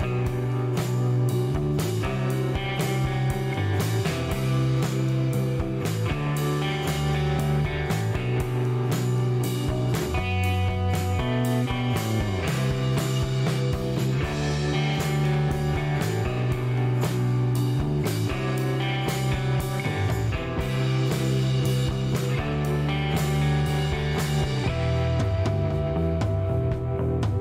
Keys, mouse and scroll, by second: 2.6 click, 3.3 click, 4.2 click, 5.1 click, 6.1-6.5 middle drag, 6.9 scroll up 1, 7.3 middle click, 8.6 click, 10.5 click, 11.3 space, 12.4 click, 15.8 click, 16.3 right click, 16.8 click, 17.7 scroll up 1, 18.2 middle click, 20.0 click, 21.1 click, 22.1 middle click, 23.5 click, 26.5 click.